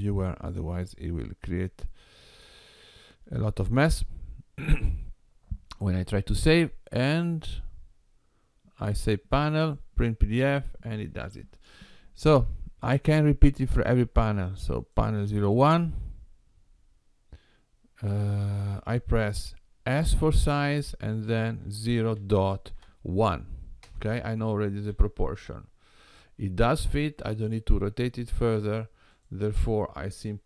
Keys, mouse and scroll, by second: 12.4 scroll down 2, 14.7 click, 20.0 s, 24.9 g.